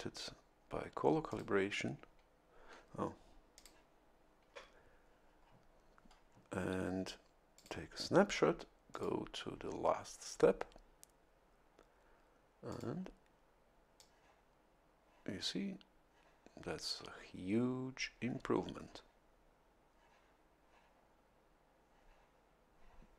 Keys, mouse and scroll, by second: 1.2 click, 3.5 click, 7.5 click, 8.9 click, 12.7 click, 13.9-23.1 drag.